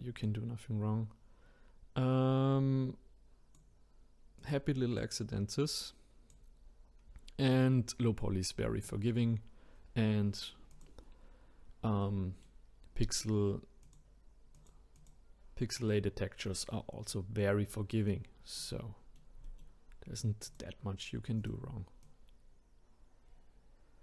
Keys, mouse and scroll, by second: 0.2 click, 4.4 click, 5.0 click, 7.1-7.5 scroll down 2, 10.7 click, 12.0 middle click, 12.8-13.8 scroll down 1, 13.8 click, 14.9 click, 15.8 click, 16.4-20.5 middle drag, 20.5 click, 21.4 click, 22.0 click.